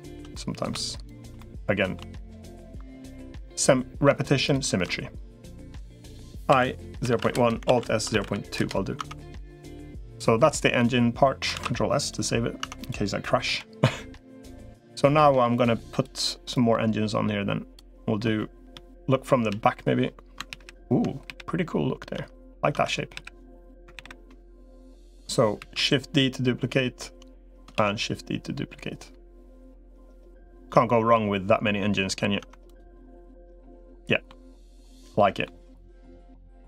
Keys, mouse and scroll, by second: 0.1 middle click, 1.2 middle click, 2.7-3.8 middle drag, 4.2 shift+click, 4.7 middle click, 6.4 i, 7.4 alt+s, 8.8 Tab, 10.2 middle click, 11.4 ctrl+s, 12.4 Tab, 12.6 click, 13.2 l, 13.6 middle click, 15.4 click, 16.4-17.6 drag, 17.7 middle click, 18.6 KP_3, 19.4 KP_1, 20.4 ctrl+KP_1, 21.0 KP_1, 22.0 Tab, 22.6 Tab, 23.0 KP_1, 23.8 ctrl+KP_1, 25.4 shift+d, 27.6 shift+d, 30.9 middle click, 32.2 Tab, 32.7-34.1 middle drag, 34.7 middle click, 36.4 middle click.